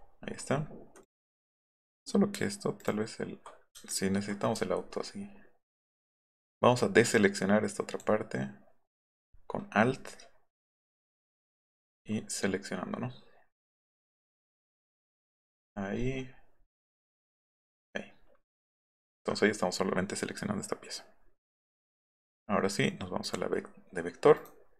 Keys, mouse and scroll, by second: 1.0 click, 2.8 ctrl+click, 3.9 ctrl+click, 4.6-5.0 alt+scroll up 2, 5.2 alt+scroll down 1, 6.8 alt+click, 8.9-10.0 alt+scroll up 5, 10.6 alt+click, 12.0-12.5 alt+scroll up 2, 13.0 alt+scroll down 1, 13.6-14.7 alt+drag, 15.6-16.0 alt+scroll up 3, 17.3 alt+click.